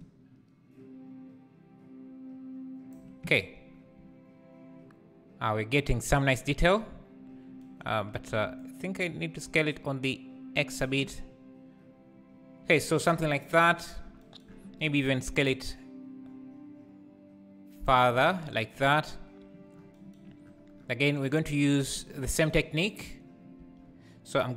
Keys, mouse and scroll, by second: 0.0-2.6 drag, 8.7-18.2 shift+drag, 21.2-24.5 drag.